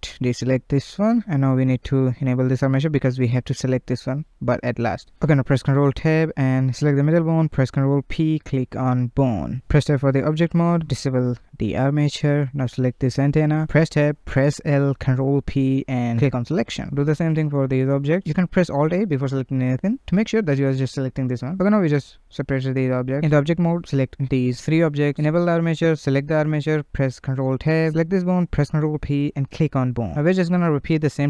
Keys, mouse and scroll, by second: 0.2 shift+middle click, 0.8 shift+click, 1.5-1.9 scroll down 2, 1.9-2.3 shift+middle drag, 3.3 click, 4.5 shift+click, 5.3 ctrl+Tab, 6.8 click, 8.3 ctrl+p, 10.0 ctrl+Tab, 11.3 click, 12.4 click, 12.8 Tab, 13.9 alt+a, 14.8 l, 15.6 p, 16.6 Tab, 16.9 click, 17.9 Tab, 18.7 alt+a, 19.8 l, 20.5 p, 21.6 Tab, 22.1 click, 22.7 ctrl+z, 22.7 shift+click, 24.5 click, 25.7 shift+click, 26.4 ctrl+Tab, 27.4 click, 28.1 ctrl+p, 29.7 ctrl+Tab, 30.6 ctrl+z, 31.0 shift+click.